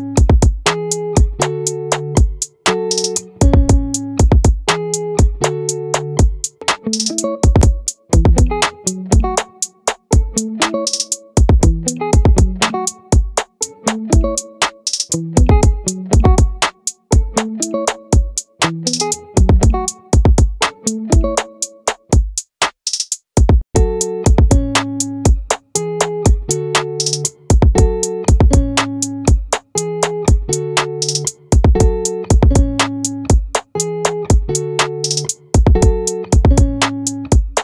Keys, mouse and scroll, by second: 4.5-7.2 drag, 7.2 middle click, 8.5 ctrl+r, 12.7-14.5 drag, 15.9 Tab, 18.1 Tab, 19.7 z, 21.1 z, 24.2-25.6 drag, 26.2-30.0 right drag, 28.4-29.6 drag, 30.0 click, 31.8-34.2 right drag.